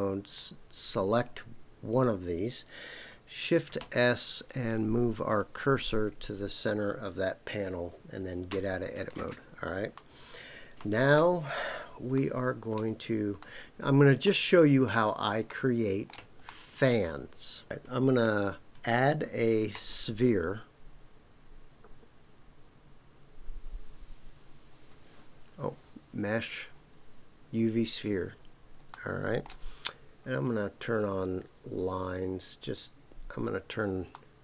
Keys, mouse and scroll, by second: 0.2 click, 3.6 shift+s, 8.5 Tab, 9.9-11.2 middle drag, 12.1-12.7 shift+middle drag, 13.4 middle click, 14.6 scroll up 3, 15.4-16.1 shift+middle drag, 16.4-17.6 middle drag, 19.7 shift+a, 28.9-29.5 middle drag, 32.4-33.2 typing, 32.7 click, 34.1-34.4 middle drag.